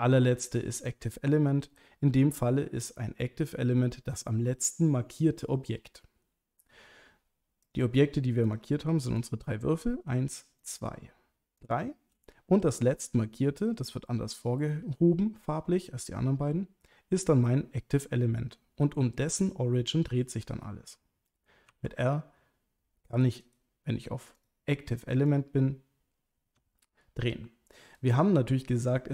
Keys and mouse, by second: 7.7 click, 8.5 click, 9.2 click, 11.6 shift+click, 21.7 r, 23.4 right click, 24.5 click, 26.5 r, 27.9 right click.